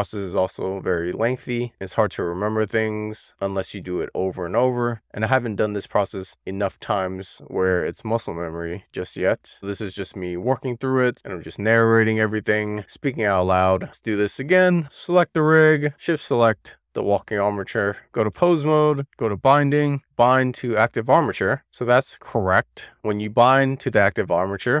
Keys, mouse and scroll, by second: 15.0 click, 16.5 shift+click, 18.0 click, 19.1-24.8 right drag.